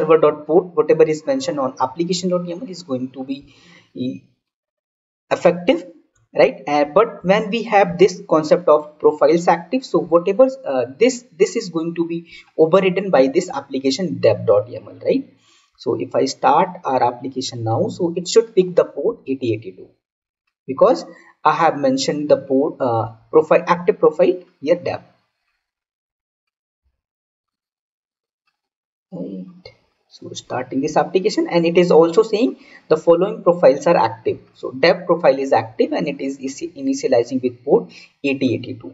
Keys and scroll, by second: 7.1 ctrl+z.